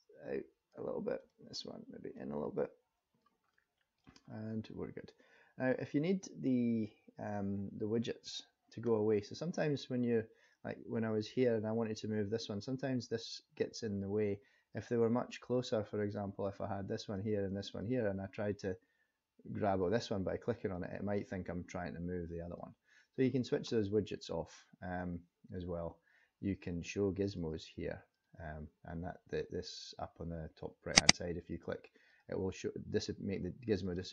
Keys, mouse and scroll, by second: 1.2 click, 2.2 click, 3.5 middle click, 4.3 scroll up 2, 10.4 click, 15.6 click, 16.5 click, 17.7 click, 19.7 click, 20.7 click, 27.3 click, 28.1 click, 31.0 click, 31.3 click, 32.1 click, 33.8 click.